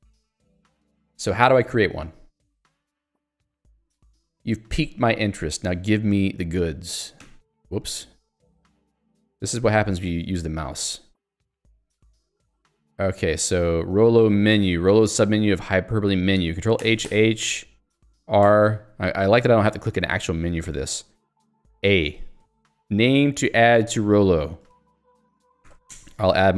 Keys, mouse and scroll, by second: 3.1 click, 5.0 middle click, 7.4 middle click, 8.9 middle click, 10.9 middle click, 18.4 r, 21.9 a, 24.4-26.2 typing.